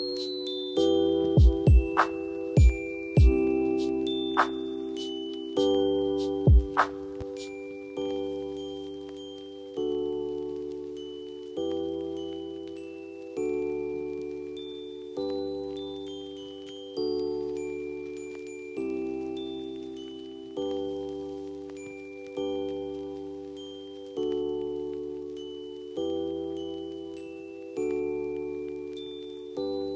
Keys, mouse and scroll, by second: 0.7 right click, 1.8 click, 3.8 right click, 4.5 click, 5.2 shift+click, 5.7-6.6 typing, 6.5-9.1 drag, 11.8-12.7 drag, 21.6 F2, 21.8-22.8 drag, 24.5 F2, 26.0-26.6 click, 29.2 F2, 29.6-29.9 drag.